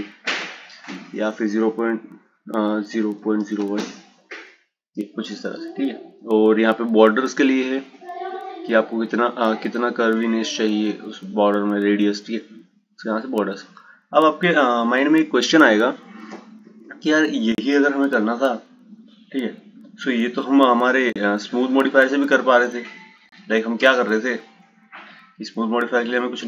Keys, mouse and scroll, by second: 0.1-3.3 drag, 6.9-10.0 drag, 13.8 click, 15.5 click, 21.7 click, 24.6-25.9 drag, 26.3 shift+a.